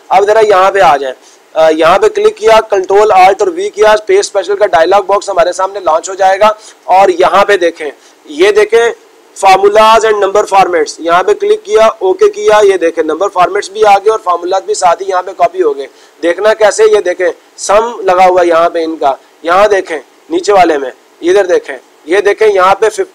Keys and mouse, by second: 1.7-2.7 drag, 7.5-8.5 drag, 11.0-12.0 drag, 12.2-13.3 drag, 15.3-16.6 drag, 19.8 click, 21.4 click.